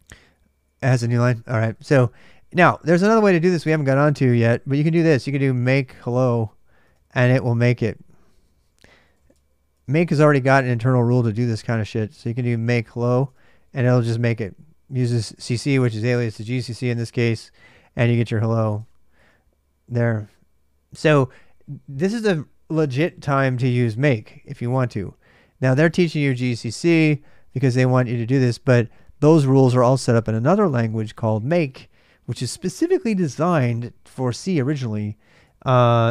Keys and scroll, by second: 0.0-0.1 typing, 1.1 ctrl+[, 1.3 k, 1.5 k, 2.4 ctrl+c, 4.9-6.8 typing, 8.3-13.4 typing, 16.6 typing, 17.8-19.5 typing, 26.1 super+Tab, 35.2 super+Tab.